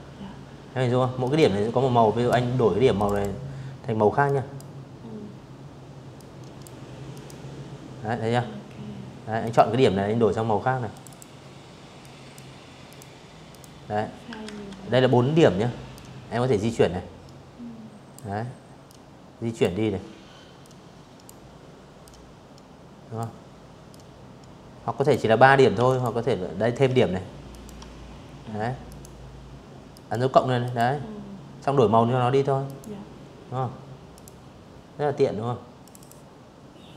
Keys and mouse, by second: 0.6 click, 0.8 click, 1.9 click, 3.8 click, 4.8 click, 7.1 click, 8.5 click, 8.7 click, 9.7 click, 10.5 click, 11.1 click, 12.1 ctrl+z, 13.6-15.8 drag, 16.5 click, 18.3 click, 19.7-20.8 drag, 21.6-22.7 drag, 23.5 alt+click, 25.2 alt+click, 26.5 click, 27.6 click, 28.3 click, 30.3 click, 31.8 click, 33.5 click, 33.6 click, 34.9 click, 35.7 click, 36.9 v.